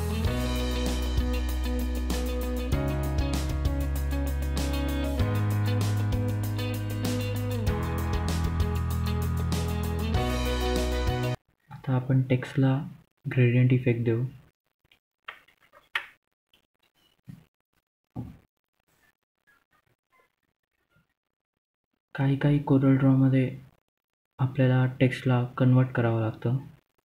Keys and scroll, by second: 8.0 Delete, 9.9-11.1 typing, 11.7 ctrl+a, 15.1-16.5 typing, 18.0-19.4 typing.